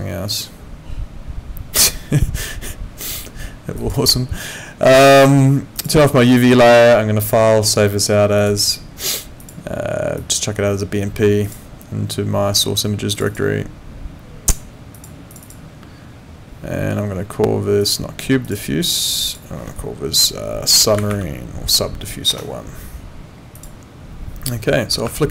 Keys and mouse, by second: 3.8 click, 5.7 click, 7.2 click, 8.4 click, 11.4 click, 13.1 click, 14.9 click, 17.8 click, 22.3 Return, 22.3 KP_Enter, 23.6 click, 25.0 alt+Tab.